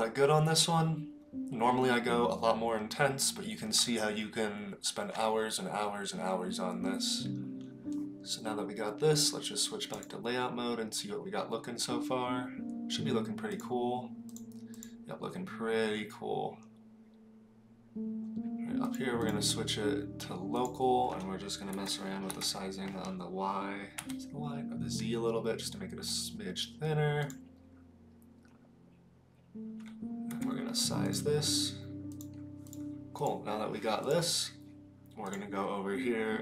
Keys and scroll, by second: 21.7 s, 30.3 s.